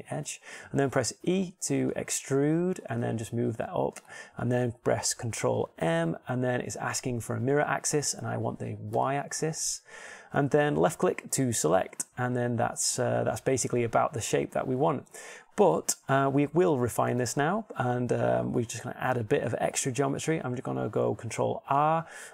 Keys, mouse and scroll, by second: 2.1 click, 2.1 e, 6.4 ctrl+m.